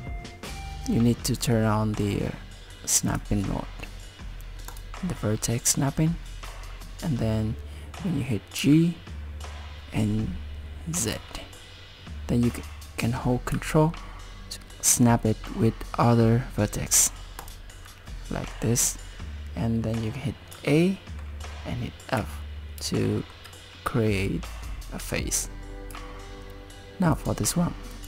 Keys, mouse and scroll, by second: 1.3 click, 3.1 click, 8.6 g, 18.8-20.5 scroll down 4, 20.5 a, 22.2 f, 23.1 shift+middle click, 25.9 z, 27.0 scroll up 1, 27.2 click, 27.9 click.